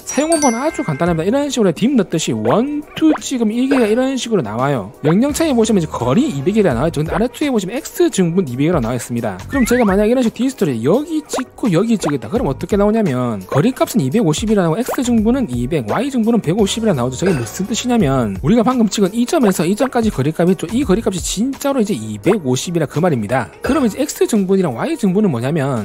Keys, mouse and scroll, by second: 2.8 click, 3.7 click, 9.9 right click, 11.4 click, 12.6 click, 19.5 click, 20.5 click, 21.3 click, 21.6 click, 22.1 click, 22.5 click, 23.1 click, 23.4 click.